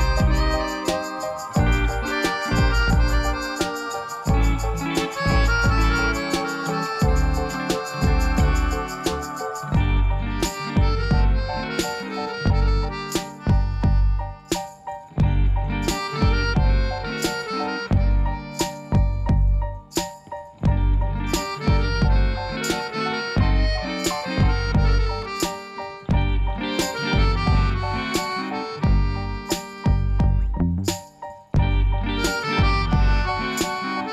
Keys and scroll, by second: 2.4 i, 10.4 Tab, 11.1 g, 16.6 g, 21.2 Tab, 25.9 ctrl+z, 27.1 ctrl+z, 29.7 Tab.